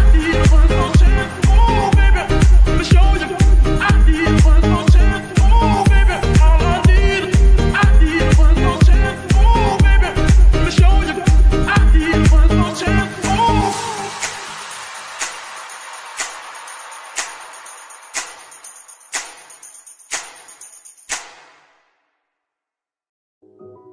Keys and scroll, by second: 18.3 ctrl+Tab.